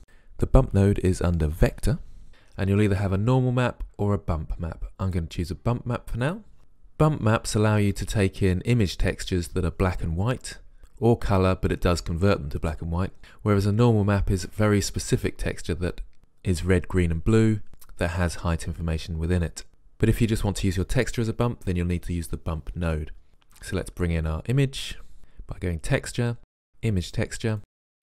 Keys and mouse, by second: 0.0 Delete, 0.0 shift+a, 23.9 shift+a.